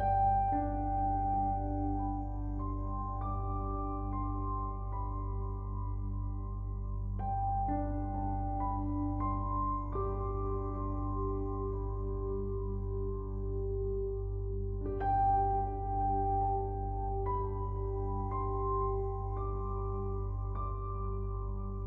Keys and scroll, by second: 15.9 ctrl+0.